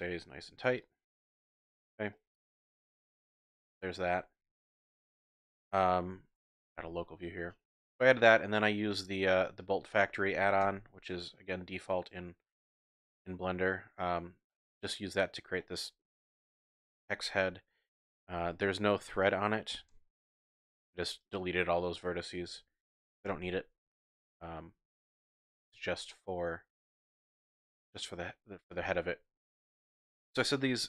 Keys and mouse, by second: 0.4 ctrl+r, 1.4 click, 1.5 Tab, 2.1-3.7 ctrl+drag, 4.7 x, 8.9 shift+drag, 9.1 shift+middle click, 9.9 click, 10.6 KP_Decimal, 11.7 click, 12.5-14.4 middle drag, 14.8-15.2 middle drag, 15.6-16.9 middle drag, 18.3 g, 18.4 x, 19.0 click, 19.7 g, 19.9 y, 20.3 click, 20.6 ctrl+middle drag, 20.8 ctrl+click, 21.8-22.3 drag, 23.2 alt+x, 24.4 ctrl+z, 25.6-26.3 middle drag, 26.3-27.0 drag, 27.0 middle drag, 27.1 drag, 27.4 middle drag, 27.6 click, 28.8-29.4 shift+drag.